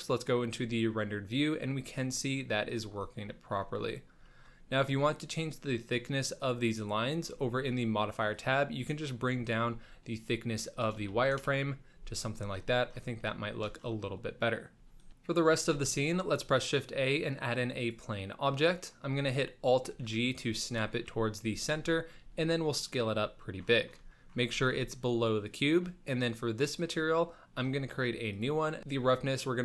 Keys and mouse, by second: 0.1-0.6 middle drag, 2.5-2.8 middle drag, 3.4 shift+middle click, 4.3 shift+middle click, 6.4 click, 8.3-11.4 shift+drag, 10.9 BackSpace, 11.1 BackSpace, 13.4 shift+middle click, 14.7 z, 15.7 shift+a, 18.8 middle drag, 19.9 alt+g, 20.9 KP_1, 21.7 z, 22.2 s, 23.4 shift+middle drag, 24.1 shift+middle click, 24.6 g, 26.6 click, 28.3 click, 28.9 ctrl+click.